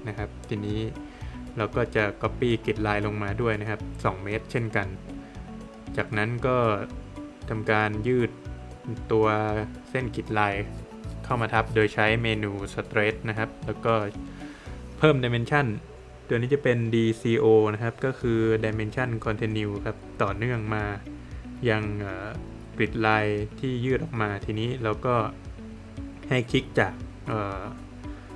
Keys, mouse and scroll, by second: 0.7 click, 2.0 Return, 2.6 Escape, 4.1 space, 4.9 click, 6.0 space, 6.7 click, 9.0 click, 9.5 Escape, 10.4 middle click, 10.7 scroll up 1, 11.0 Escape, 11.5 click, 12.1 Escape, 12.5 scroll down 1, 12.6 middle click, 15.8 space, 23.7 space, 25.3 click.